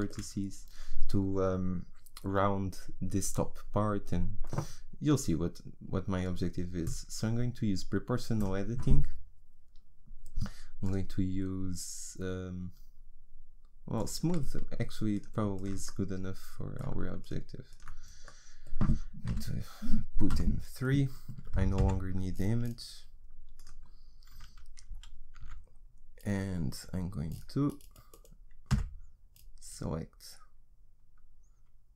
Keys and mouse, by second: 6.9-15.1 drag, 15.1 right click, 15.9-19.3 middle drag, 19.3 KP_1, 20.3 KP_3, 21.8 n, 25.4 z, 28.7 g.